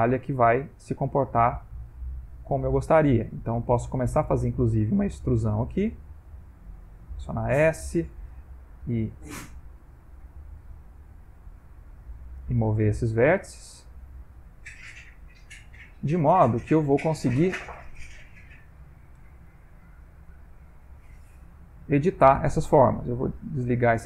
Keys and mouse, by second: 0.8 middle click, 2.1 click, 2.7 e, 4.3 e, 6.4 s, 7.7 click, 8.2 middle click, 9.2 g, 11.1 s, 12.2 middle click, 13.0 ctrl+middle click, 13.8 g, 16.6 click, 17.5 1, 18.3 click, 19.8 g, 20.9 click, 21.2 g, 23.4 click.